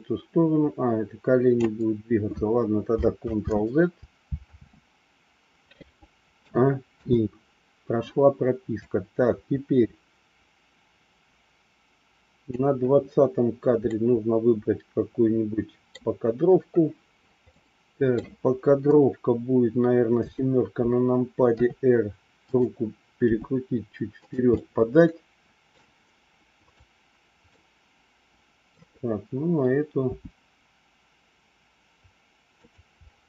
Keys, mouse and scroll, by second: 3.2 ctrl+z, 4.4 ctrl+z, 6.4 a, 6.9 i, 8.8-12.5 drag, 13.9-15.9 middle drag, 17.5 middle click, 20.1 KP_7, 21.5 r, 23.4 g, 24.6-26.0 middle drag, 26.5 click, 27.6-28.7 middle drag, 30.1 g, 33.1 scroll up 1.